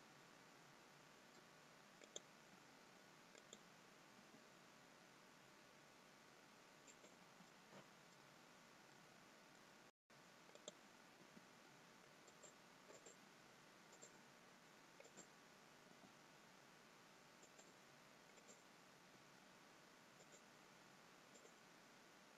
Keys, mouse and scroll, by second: 2.1 click, 3.4 click, 4.3 g, 7.7 middle click, 8.6-9.3 scroll down 3, 9.0 middle click, 10.5 click, 11.1 g, 12.9 click, 13.9 click, 14.9 click, 15.8 g, 18.2 click, 19.0 g, 21.2 click.